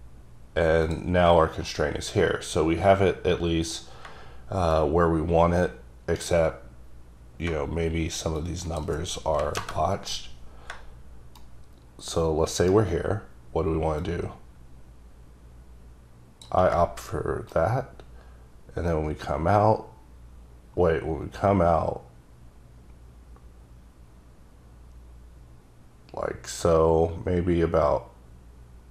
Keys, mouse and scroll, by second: 0.6 scroll down 2, 1.0 click, 2.1-2.6 scroll up 1, 2.6-3.1 scroll down 1, 3.1-3.9 scroll down 1, 4.9-6.4 shift+right drag, 8.5 click, 9.5 KP_0, 9.7 KP_Enter, 11.5 shift+right click, 14.1 click, 17.6 right click.